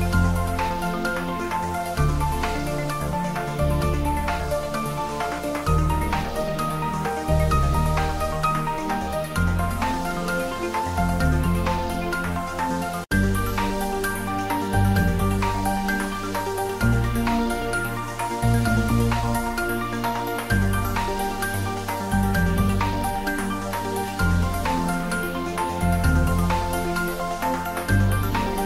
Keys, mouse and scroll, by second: 1.0 click, 1.9 r, 2.7 click, 2.9 ctrl+z, 3.8 click, 4.6 r, 5.7 click, 5.9 s, 6.5 click, 7.1 middle click, 7.9-8.8 typing, 9.1 click, 9.4 ctrl+z, 10.4 s, 10.8 click, 12.3 shift+middle click, 13.0-14.7 ctrl+middle drag, 14.7 r, 15.7 click, 16.3 r, 18.4 click, 18.5 ctrl+z, 18.9 r, 19.6 click, 20.0 r, 20.1 r, 21.1 click, 21.6 r, 22.3 click, 22.7 g, 23.5 click, 24.0 middle click, 25.0 click, 26.1 shift+d, 26.6 click, 26.8 ctrl+z, 27.3 shift+middle click, 28.2 shift+z.